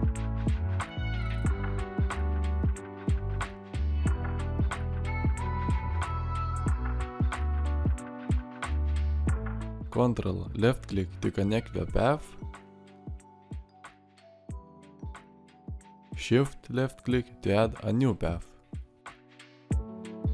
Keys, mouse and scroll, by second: 16.1 shift+click.